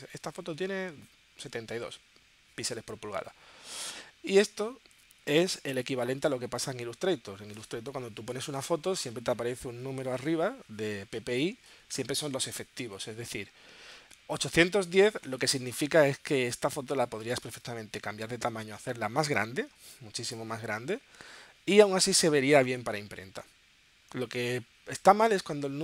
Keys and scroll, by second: 19.8 space.